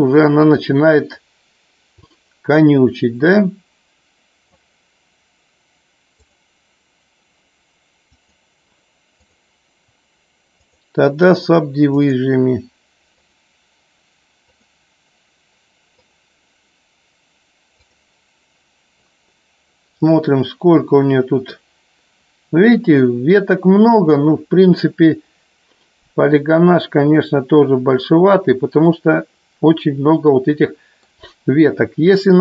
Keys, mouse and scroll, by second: 6.1 click, 8.2-9.5 drag, 10.6 click, 12.0 click, 13.1 click, 15.3 click, 15.9 click, 17.6 click, 28.9-31.5 middle drag.